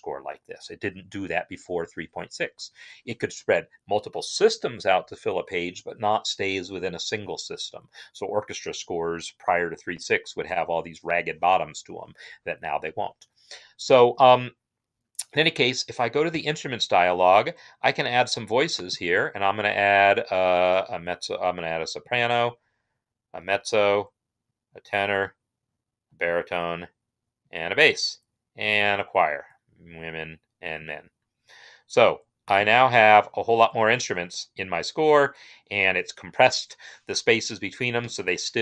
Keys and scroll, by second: 16.2 i.